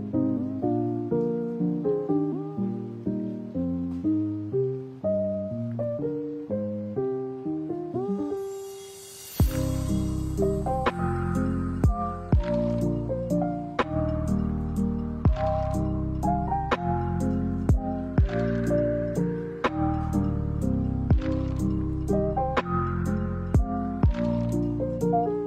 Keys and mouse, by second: 5.6-6.0 drag, 7.4 click, 8.3 middle drag, 9.8 right click, 10.4 x, 11.1 middle drag, 11.4-12.0 drag, 13.1 right click, 14.9 alt+right click, 15.4 alt+right click, 15.9 shift+middle click, 16.5 middle click, 17.0 middle click, 18.1 middle click, 18.8 e, 20.4 shift+middle click, 20.9 s.